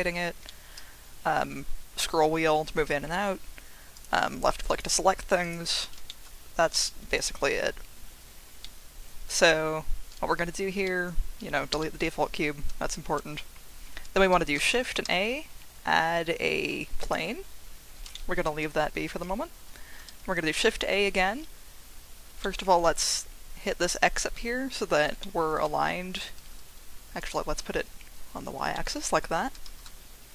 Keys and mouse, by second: 0.5 shift+middle drag, 3.9 click, 5.4 click, 6.1 shift+middle drag, 8.6-9.3 middle drag, 10.8 middle click, 11.7 Delete, 15.1 shift+a, 18.1 shift+middle drag, 20.2 shift+a, 22.4 middle click, 25.2-25.5 shift+drag, 27.2-28.5 drag, 28.7 shift+drag, 29.6 shift+a.